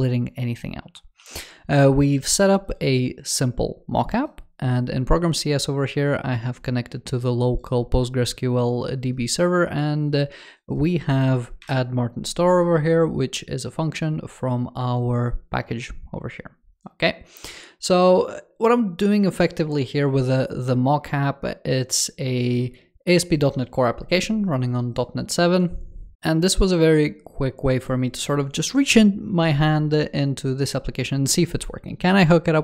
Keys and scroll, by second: 1.0 w, 25.2 super+BackSpace, 25.3 w.